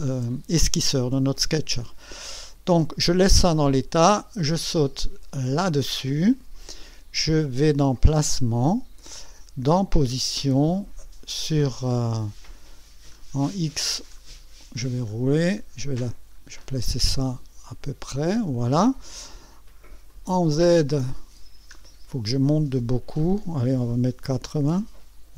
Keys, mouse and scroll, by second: 4.0 click, 5.4 click, 8.3 click, 9.7 click, 11.0 click, 11.8-17.9 scroll down 29, 20.1 click, 20.7-21.5 scroll down 4, 21.7-22.6 scroll up 4, 22.8-23.5 scroll up 4, 24.3 KP_8, 24.7 KP_0.